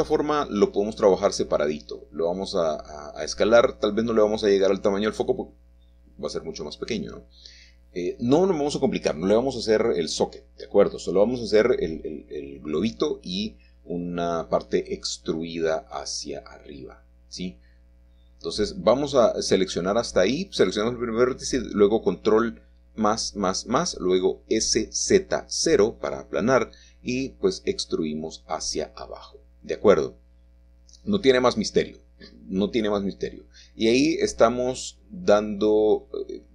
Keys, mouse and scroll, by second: 0.6-2.3 shift+middle drag, 1.0-1.4 shift+scroll up 1, 2.6 s, 4.7 click, 4.9 Tab, 5.7 click, 5.9-7.6 shift+middle drag, 10.5-13.5 shift+middle drag, 14.2-18.7 drag, 18.7-19.8 scroll down 1, 22.1 s, 23.0 Return, 26.2 e, 28.7 click, 31.5 g, 35.5 click.